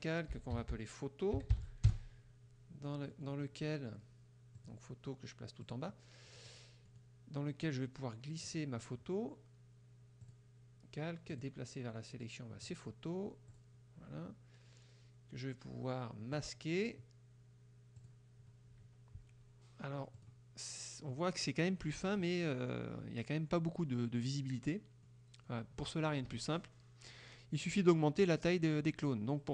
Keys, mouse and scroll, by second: 0.1-2.1 typing, 3.1 middle click, 4.6 click, 5.7 click, 6.4 middle click, 6.9 scroll up 1, 6.9 middle click, 8.5 click, 10.4 click, 11.4 click, 12.7 click, 13.6 click, 16.4 click, 18.1 click, 20.2 click, 20.9 middle click, 24.6 middle click, 25.1 middle click, 26.4 KP_Subtract.